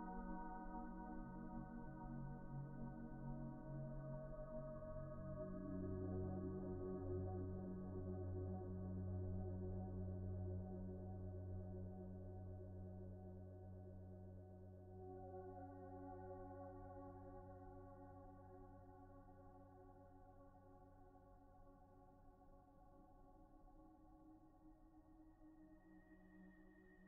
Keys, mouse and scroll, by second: 2.3 2, 3.0 ctrl+z, 4.4 ctrl+z, 4.5 ctrl+z, 10.7 ctrl+z, 10.7 ctrl+z, 12.2 p, 19.1 typing, 22.9 ctrl+z, 26.5 shift+s.